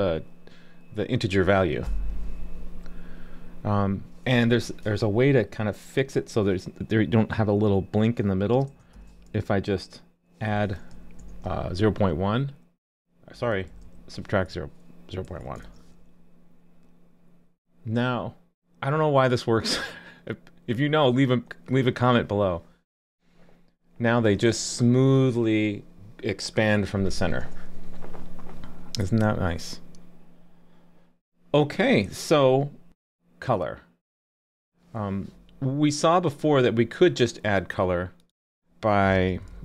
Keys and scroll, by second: 11.2 super+s, 15.6 super+s.